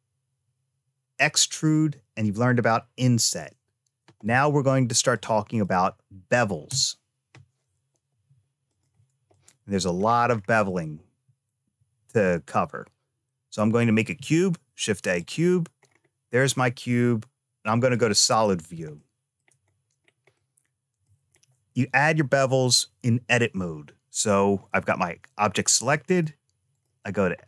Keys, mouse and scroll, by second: 5.0 click, 6.5 BackSpace, 8.0 x, 9.9-11.0 scroll down 3, 13.5 shift+a, 15.7 scroll up 2, 16.3 middle click, 17.7 click, 18.8 shift+middle click, 19.6-20.2 scroll up 2, 20.2 middle click, 25.9 click, 27.3 middle click.